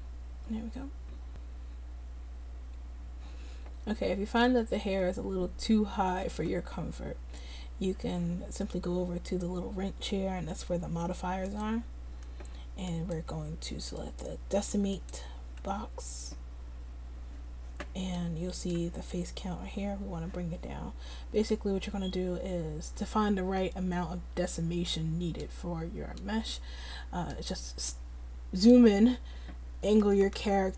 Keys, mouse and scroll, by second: 5.1-7.2 middle drag, 12.1-16.7 middle drag, 18.3 middle click, 20.8 click, 21.1 middle click, 23.5-25.0 middle drag, 25.9 middle click, 26.5-30.7 middle drag.